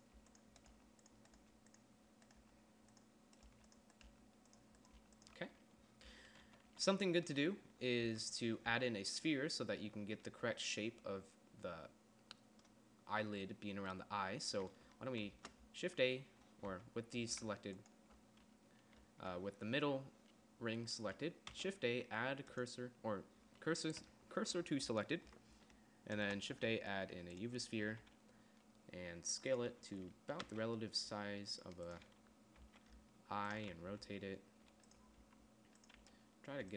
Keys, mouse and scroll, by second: 0.1 g, 0.6 g, 1.1 g, 1.7 g, 2.8 g, 3.9 g, 4.5 g, 5.4 g, 6.5 Tab, 6.9 z, 7.1 z, 8.5 Tab, 9.1 Tab, 15.7 shift+a, 17.1 Tab, 21.9 shift+s, 25.7 Tab, 26.6 shift+a, 28.2 s, 30.2 z, 30.9 r, 33.0 r, 34.3 g, 35.6 s, 36.4 g.